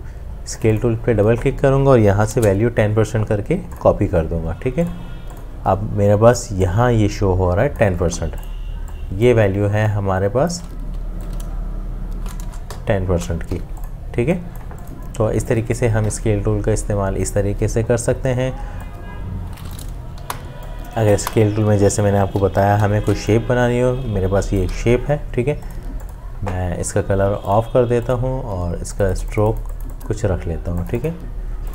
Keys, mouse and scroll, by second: 2.3 1, 9.9 alt+click, 10.9 t, 12.4 BackSpace, 13.5 Escape, 20.2 Delete.